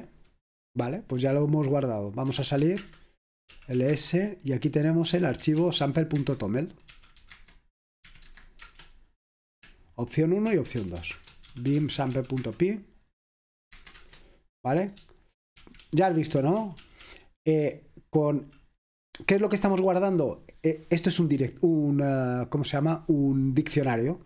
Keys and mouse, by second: 2.4-8.6 typing, 10.3-14.0 typing, 15.7-19.5 typing, 22.9 click.